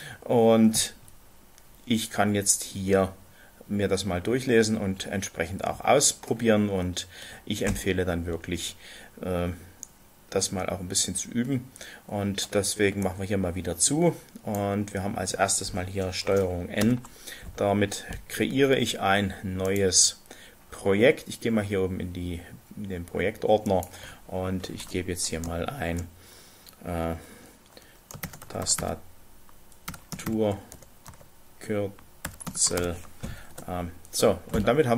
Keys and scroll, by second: 16.9 ctrl+n, 28.2-28.8 typing, 29.9-31.1 typing, 32.3-33.6 typing, 33.6 shift+Return.